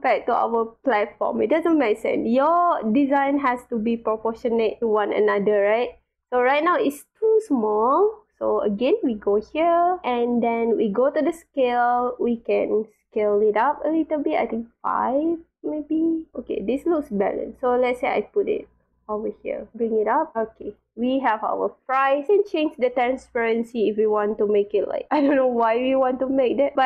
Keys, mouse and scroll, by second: 1.5 drag, 2.1 scroll up 1, 2.8 scroll down 1, 3.2-4.8 drag, 6.7-7.2 scroll up 4, 7.3-7.9 scroll down 4, 8.9 click, 11.2 click, 11.7 click, 15.7 click, 16.3-17.6 drag, 18.4-19.2 drag, 19.5-19.9 drag, 20.3-20.7 drag, 22.8-23.6 drag, 25.1 scroll up 2, 25.5-26.1 drag, 26.5 scroll up 1.